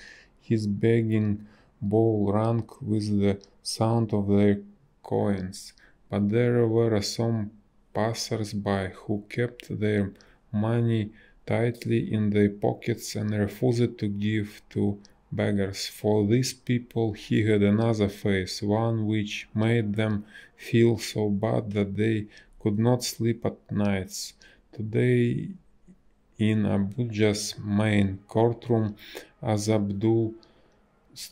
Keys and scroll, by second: 4.5 a, 7.2 space, 13.8 space, 16.0 b, 16.6 space, 25.9 space, 27.9 ctrl+z, 29.7 ctrl+z.